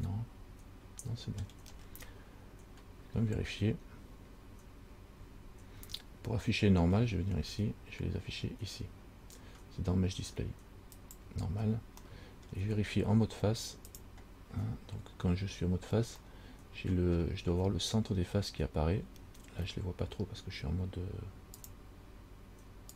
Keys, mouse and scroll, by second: 0.1 middle click, 2.0 scroll down 4, 3.3-3.7 scroll up 2, 7.2-8.9 scroll down 8, 11.2 click, 12.4 middle click, 14.2 click, 14.8-15.3 scroll up 3, 16.6 middle click, 19.2-19.6 scroll down 3, 21.8 click.